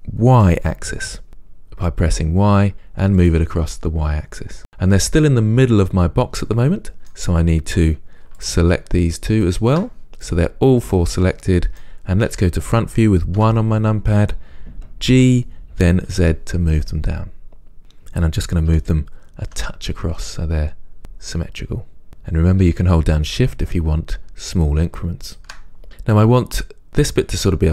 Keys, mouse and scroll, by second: 4.3 click, 4.6-8.7 middle drag, 8.7 shift+click, 10.5-19.0 middle drag, 13.6 KP_1, 15.4 g, 23.0 g, 25.6 shift+click.